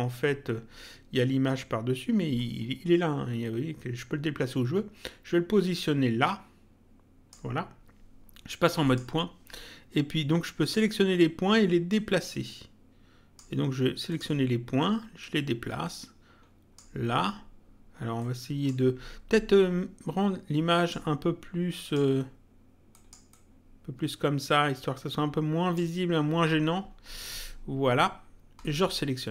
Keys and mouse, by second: 2.3 click, 8.8 click, 10.6 click, 11.9 click, 14.0 click, 15.2 click, 18.1 click, 20.7 click, 22.9 click, 28.6 click.